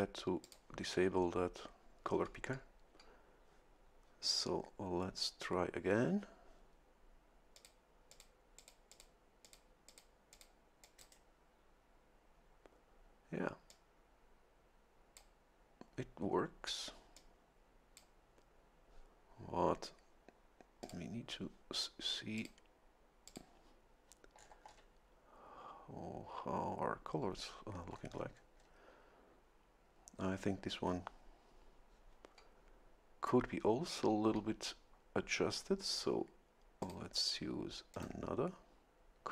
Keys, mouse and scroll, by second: 0.4 click, 7.5 click, 8.1 click, 8.6 click, 9.4 click, 9.9 click, 10.3 click, 10.8 click, 11.0 right click, 13.7-15.3 drag, 17.1-18.1 drag, 20.8 click, 22.4 click, 23.3 click, 24.3-24.9 scroll down 1, 27.9-28.8 scroll up 1, 36.8 click, 37.9 click.